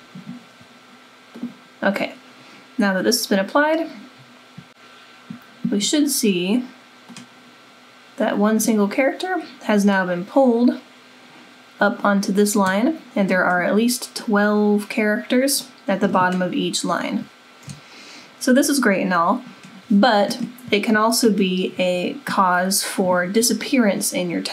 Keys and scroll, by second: 0.0 super+=.